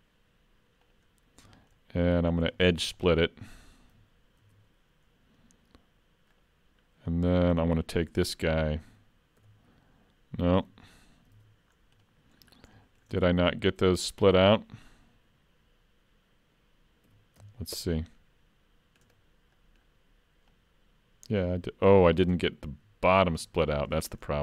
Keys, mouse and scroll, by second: 1.5-2.3 scroll up 3, 1.8 middle click, 2.3 scroll down 3, 2.6 shift+middle click, 2.9 middle click, 4.4 ctrl+e, 6.8-7.3 scroll up 3, 7.3 middle click, 8.8 alt+a, 9.4 l, 11.4 alt+a, 11.7-12.1 scroll down 3, 12.1 middle click, 12.5 scroll up 3, 12.8 shift+middle click, 13.2 middle click, 17.1 3, 17.4 c, 19.5 middle click, 20.5 click, 23.2 ctrl+z, 23.8 middle click, 24.3 shift+middle click.